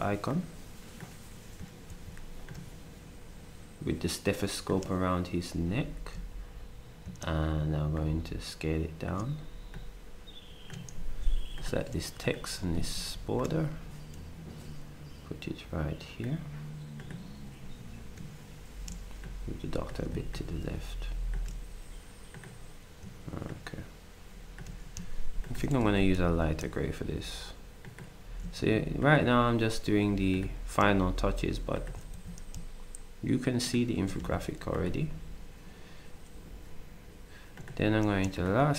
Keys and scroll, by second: 1.9 ctrl+d, 13.1 ctrl+shift+d, 25.8 ctrl+shift+d, 28.6 s, 32.1 d.